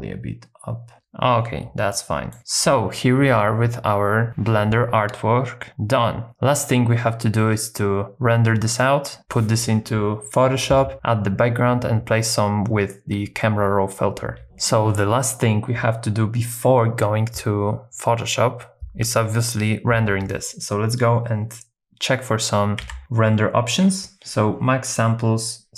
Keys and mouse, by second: 2.0 shift+middle click, 14.4 z, 22.8 z, 25.0-25.7 drag.